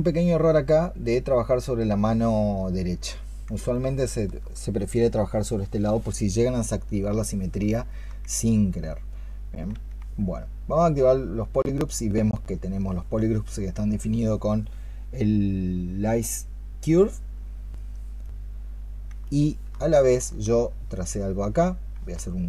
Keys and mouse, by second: 3.6 alt+click, 7.6 alt+click, 18.1 double click, 19.1 alt+click, 20.4 ctrl+click.